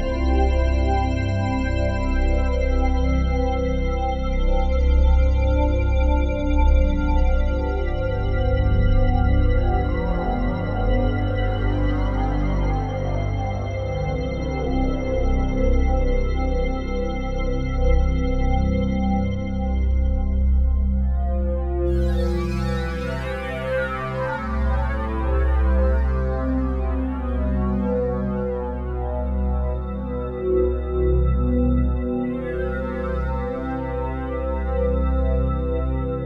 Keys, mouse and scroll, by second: 1.8-6.0 ctrl+alt+drag, 6.1-8.5 drag, 11.0-12.0 drag, 15.9 click, 18.4 click, 21.8 click, 24.5 click, 27.6-33.5 drag, 33.8 Tab, 35.2 Tab.